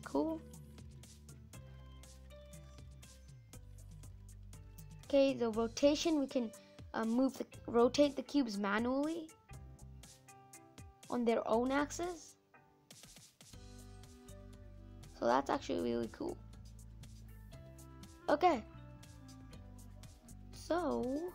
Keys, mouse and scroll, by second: 0.0-4.6 middle drag, 4.6-7.6 drag, 8.1 middle click, 8.6-9.0 scroll down 2, 9.0-10.8 middle drag, 10.8-13.6 drag, 13.6 scroll down 1, 13.6-14.8 middle drag, 14.8 scroll up 2, 15.0 middle click, 15.6-16.0 scroll down 3, 16.0-17.2 middle drag, 17.2 click, 17.6 middle click, 18.3 scroll down 1, 19.6-21.3 middle drag, 20.7 scroll up 4.